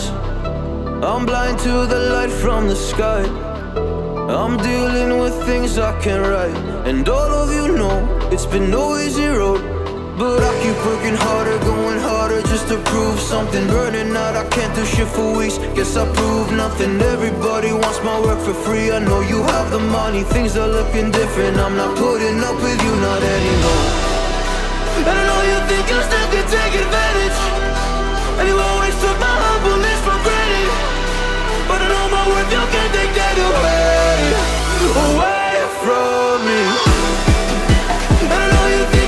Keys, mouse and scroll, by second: 0.0 space, 0.4 space, 2.3 click, 2.6 click, 3.9 z, 4.0 click, 4.0-4.6 click, 4.3 z, 5.3 p, 6.4-9.2 drag, 11.5-12.7 alt+drag, 20.2 ctrl+Return, 23.4 click, 25.0 click, 27.5-29.0 drag, 33.6 ctrl+click, 37.6 click.